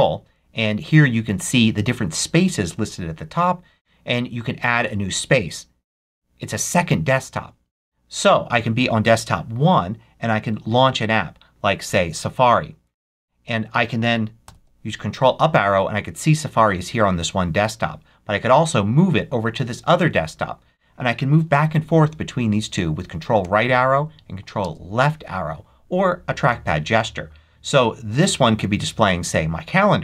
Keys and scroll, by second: 14.3 ctrl+Up, 23.3 ctrl+Right, 24.5 ctrl+Left.